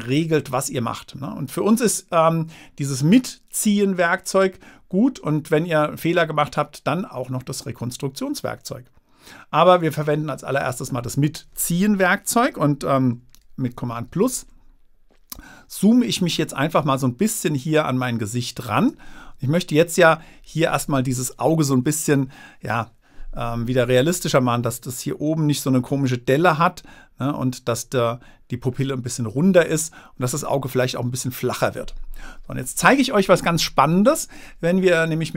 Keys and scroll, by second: 16.5 space.